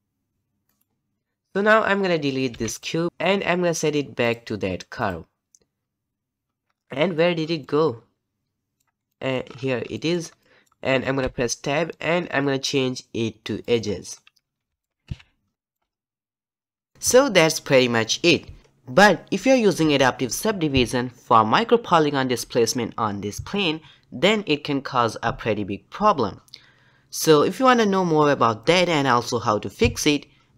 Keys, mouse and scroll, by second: 1.2 click, 2.7 x, 3.1 click, 5.0-14.6 drag, 14.6 alt+a, 15.5 shift+middle click, 15.8-16.5 scroll down 1, 16.5-16.8 scroll down 1, 16.8-21.9 middle drag, 21.9 click.